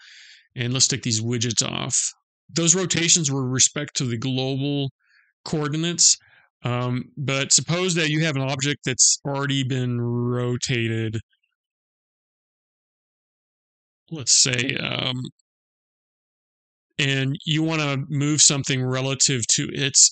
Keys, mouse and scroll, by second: 0.2 click, 10.8 r, 12.4 r, 14.3 r.